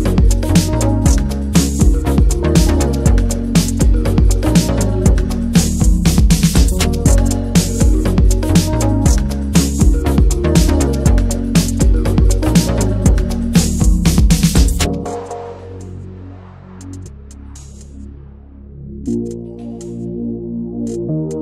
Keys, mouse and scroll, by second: 1.0 ctrl+z, 1.3 shift+f, 4.3-8.9 drag, 9.2 scroll down 3, 9.4 alt+middle click, 9.5 alt+middle click, 9.8 scroll down 1, 10.0-12.0 shift+middle drag, 12.0 Tab, 12.4 click, 12.6 l, 12.9-14.3 middle drag, 14.3 shift+h, 14.6-15.2 middle drag, 15.2 click, 15.5-16.1 scroll up 2, 15.7 middle click, 16.1-16.5 middle drag, 16.5 l, 17.8 click, 18.1 middle click, 18.9 shift+h, 19.3-20.8 middle drag, 20.8-21.3 scroll down 2, 21.3 middle click.